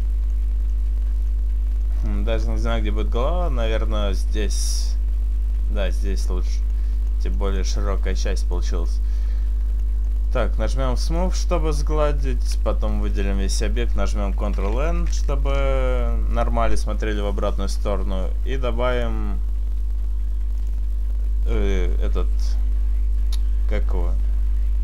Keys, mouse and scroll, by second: 0.2-0.8 scroll down 2, 0.8 middle click, 0.8-2.1 scroll down 4, 1.2 middle click, 2.1-3.1 scroll up 2, 3.1 middle click, 3.1 scroll up 2, 6.8 middle click, 7.2 middle click, 8.4 middle click, 9.8 middle click, 11.1 click, 12.2 Tab, 12.6 a, 13.1 a, 14.0 ctrl+n, 14.9 Tab, 15.5-16.3 scroll up 1, 16.3 scroll up 3, 19.0 click, 22.2 click.